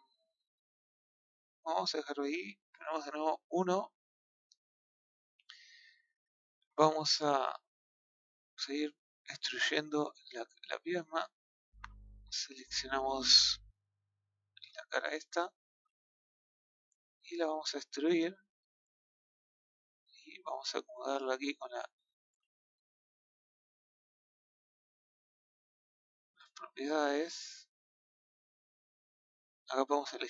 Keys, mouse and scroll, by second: 3.2 KP_1, 4.8 scroll down 1, 7.0 shift+middle click, 9.5 click, 9.8 middle click, 10.9 click, 13.3 click, 14.3 click, 15.3 KP_1, 17.7 click, 21.0-22.2 drag, 22.2 ctrl+z, 23.8 click, 26.3-29.2 drag.